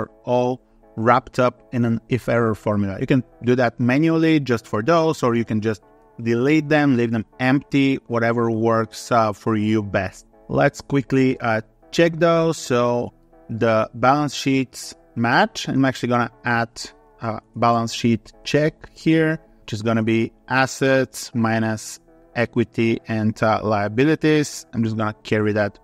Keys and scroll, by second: 19.5 ctrl+Up, 21.5 ctrl+Up.